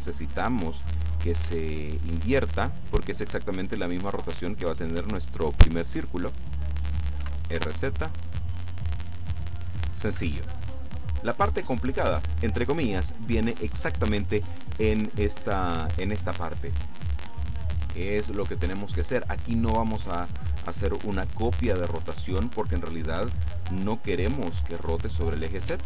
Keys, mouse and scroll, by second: 0.8 click, 1.7-2.9 shift+middle drag, 2.9-3.3 shift+scroll down 1, 6.5 right click, 7.3 r, 7.7 z, 10.1 Escape, 11.2 right click.